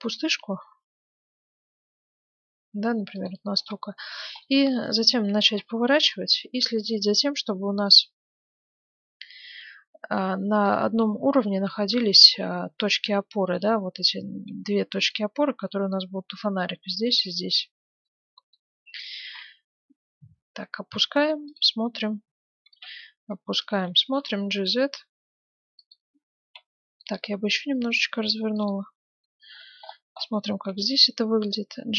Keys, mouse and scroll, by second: 3.6 middle click, 3.7 click, 4.8-6.3 middle drag, 5.5 r, 11.7 middle click, 12.6-13.1 scroll up 1, 13.1-14.8 middle drag, 14.3 r, 18.0-19.8 middle drag, 19.2 r, 22.7 r, 24.0 g, 26.4 r, 29.2-31.9 middle drag, 30.7 g.